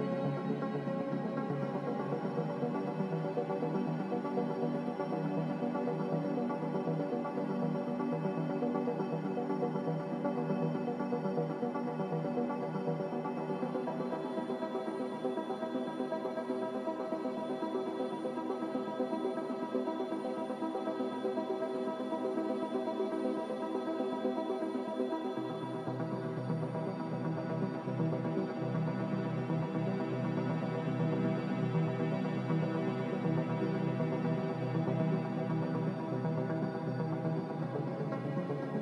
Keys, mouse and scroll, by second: 4.0 click, 7.0 click, 8.8 x, 16.9 click, 17.6 s, 18.3 h, 27.1 click, 29.4 click, 34.7 click, 38.5 click.